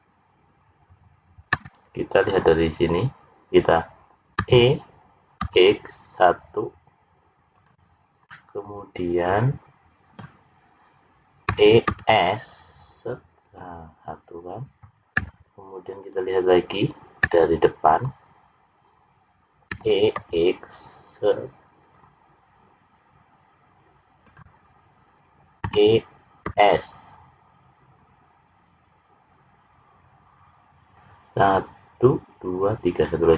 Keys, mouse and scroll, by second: 4.3 e, 8.2 middle click, 11.5 e, 19.7 e, 25.6 e.